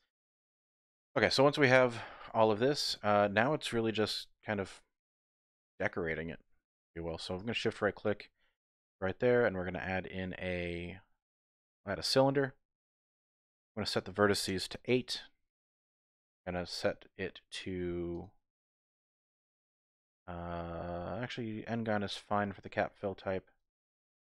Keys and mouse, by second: 0.0 typing, 0.4 Tab, 0.9 Tab, 1.2-2.3 drag, 2.5 click, 2.9 Tab, 3.3 Tab, 3.9 KP_3, 4.5 KP_1, 5.7 shift+click, 7.8 shift+click, 8.8 shift+a, 11.8 typing, 13.8-15.5 drag, 18.2-21.4 drag, 23.6-24.3 drag.